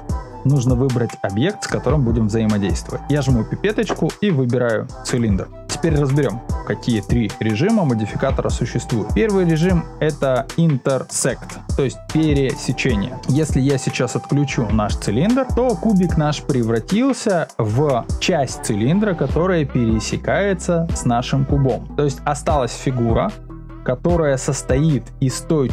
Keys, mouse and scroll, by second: 0.0 click, 3.2 click, 11.0 click, 14.9 click.